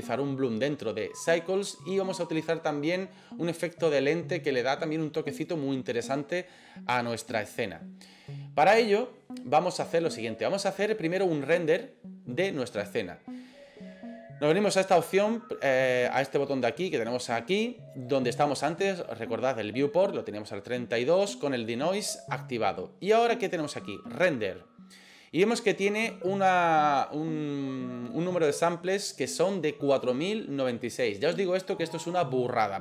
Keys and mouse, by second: 15.0 click.